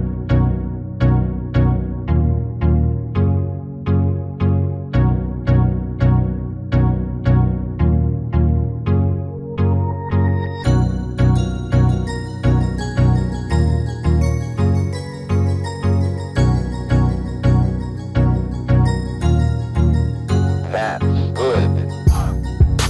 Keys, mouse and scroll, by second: 3.3-4.4 drag, 7.5 middle click, 9.8 ctrl+l, 10.5 a, 11.0 s, 12.6 r, 14.4 middle click, 16.6 Tab, 17.0 click, 17.9-19.8 middle drag, 20.2 click, 20.2 x, 21.1 right click, 21.6 shift+d.